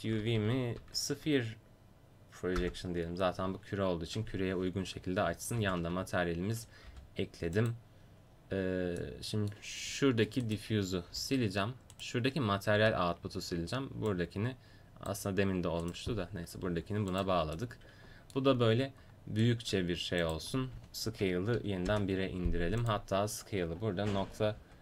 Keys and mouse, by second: 0.2 Down, 0.5 Down, 4.5 Tab, 5.6 ctrl+v, 6.9 g, 10.5 click, 11.1 Delete, 12.8 Delete, 16.6 g, 20.2-22.8 drag.